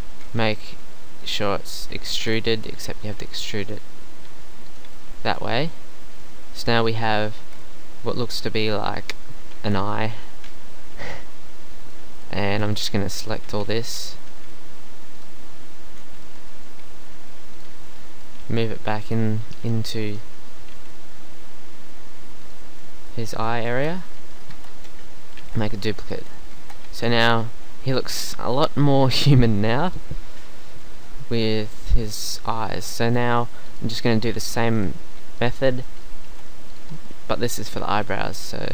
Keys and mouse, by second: 0.7 e, 2.2 ctrl+z, 2.6 KP_3, 4.3 g, 5.0 e, 7.4 Tab, 9.6 Tab, 12.5-14.3 typing, 15.6 z, 15.9 z, 18.5 g, 19.6 KP_3, 19.8 z, 20.8 g, 22.6 z, 23.0 middle click, 23.6 middle click, 23.7 Tab, 24.5 Tab, 24.8 KP_1, 25.4 shift+d, 26.2 z, 26.6 Tab, 26.9 z, 33.0 Tab, 33.7 middle click, 34.8-36.3 middle drag, 36.3 shift+d, 38.6 s.